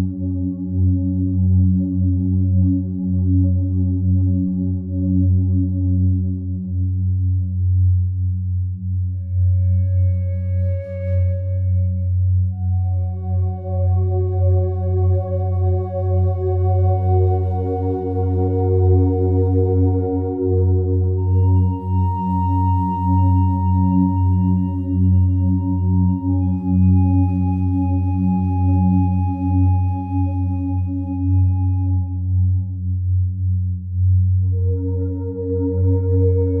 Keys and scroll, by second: 4.3 2, 4.6 Return, 14.8 Escape, 19.0 Escape, 22.9 Escape, 30.6 4, 30.8 Return.